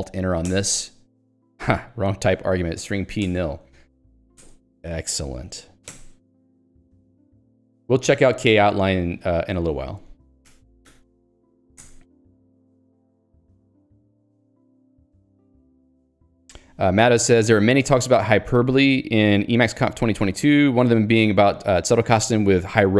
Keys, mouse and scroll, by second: 0.5 alt+Return, 2.5 h, 3.5 alt+Return, 3.9 l, 4.4 alt+Return, 5.3 alt+x, 6.0 Return, 6.5 Escape, 6.9 k, 8.4 super+e, 8.9 Escape, 9.3 q, 9.7 ctrl+alt+j, 10.5 ctrl+g, 11.9 Return.